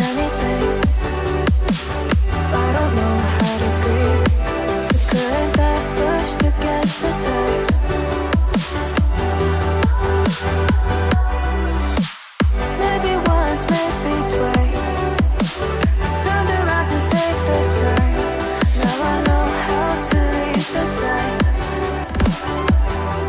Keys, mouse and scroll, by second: 1.7 ctrl+scroll down 1, 13.3-13.7 scroll down 2, 17.7 typing, 18.5 Tab, 18.9-19.6 typing, 19.7 Tab, 22.5 Left, 22.6 Left, 22.7 click, 22.8 click, 22.9 click, 23.0 click, 23.1 Left.